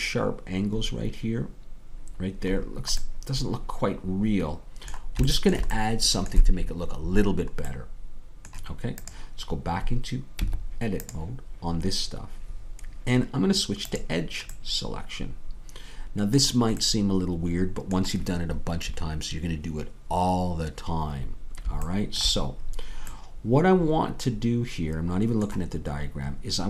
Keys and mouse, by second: 0.9 middle click, 6.5-9.8 middle drag, 9.8-11.2 drag, 10.4 Tab, 13.9-16.4 drag, 14.8-16.4 middle drag, 17.1-19.8 middle drag, 22.5-24.8 middle drag.